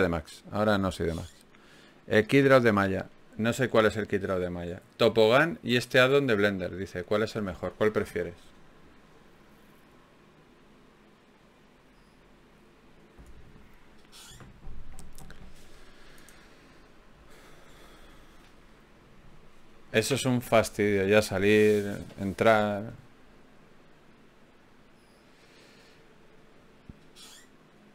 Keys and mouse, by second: 0.5 g, 4.0 g, 5.8 g, 6.8 g, 7.5 middle click, 11.2-12.5 middle drag, 13.2 right click, 13.7 middle click, 14.4 click, 15.2 g, 16.0-17.4 drag, 16.2 g, 25.1 ctrl+Tab, 27.0 x.